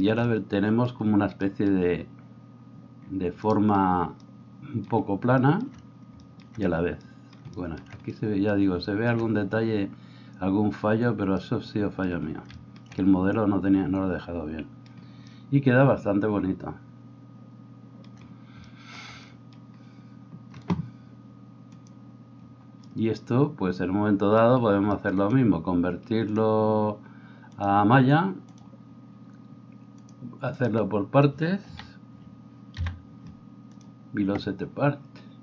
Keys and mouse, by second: 3.5-35.4 drag, 31.8 a, 32.8 p.